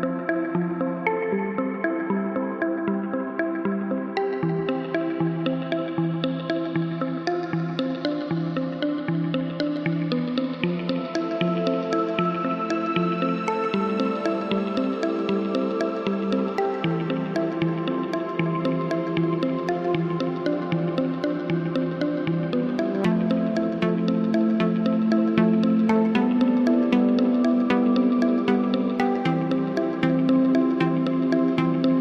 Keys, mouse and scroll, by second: 1.4 click, 3.0 click, 5.0 click, 10.2 click, 13.4 click, 13.6 click, 13.9 click, 22.5 click, 26.9 click, 27.0 click, 30.2 click.